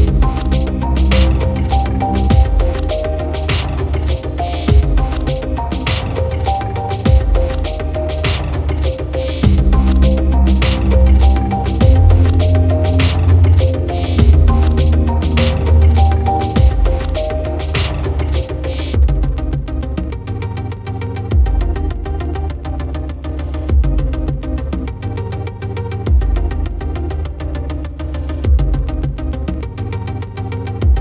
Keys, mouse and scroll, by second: 0.2 Tab, 2.2 click, 3.2 Tab, 4.7 KP_7, 7.2 click, 8.1 s, 9.3 click, 10.1 s, 10.5 click, 11.0 r, 12.4 click, 15.1 click, 15.7 s, 17.3 click, 19.0 r, 20.2 click, 21.2 click, 22.3 Tab, 22.4 click, 23.3 click, 23.5 click, 23.6 click, 23.7 click, 23.8 click, 23.9 click, 24.0 click, 24.1 click, 24.3 Tab, 24.9 Tab, 28.4 click, 28.6 click, 28.8 click.